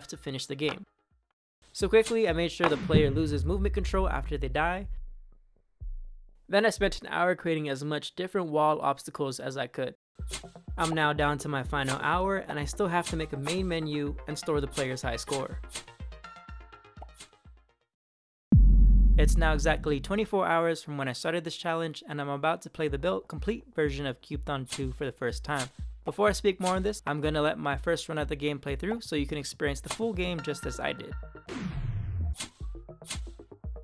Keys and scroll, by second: 1.9 Up, 5.3 Left, 5.5 Right, 5.6 Down, 5.8 Right, 5.8 Left, 5.8 Up, 6.0 Right, 6.1 Left, 6.2 Down, 6.4 Right, 6.5 space, 6.7 space, 6.9 space, 10.6 Up, 10.8 space, 11.1 Right, 11.7 Up, 12.3 space, 12.9 Up, 13.3 Up, 14.6 Up, 15.1 Up, 15.6 Up, 16.9 space, 17.0 Up, 24.5 Up, 25.0 Left, 25.4 Up, 25.9 space, 26.2 Left, 26.5 Up, 27.2 Left, 28.0 Right, 28.8 space, 29.7 Up, 31.3 Down, 32.2 Up, 32.6 Left, 32.9 Up.